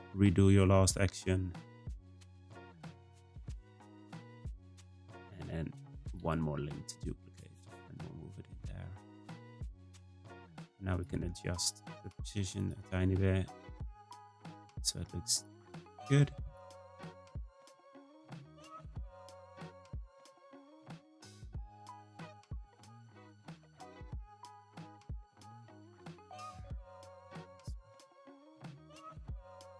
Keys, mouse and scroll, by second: 0.6 r, 1.7 g, 6.0-7.4 right drag, 7.6 r, 10.9 click, 11.1 g, 12.5 click, 12.8 g, 14.4 click, 14.7 g, 15.7 r, 17.1 click, 17.4 r, 19.3 g, 20.4 click, 20.7 g, 22.7 r, 24.2 click, 24.5 g, 26.1 click, 26.3 g, 27.5 r, 29.3 click, 29.5 g.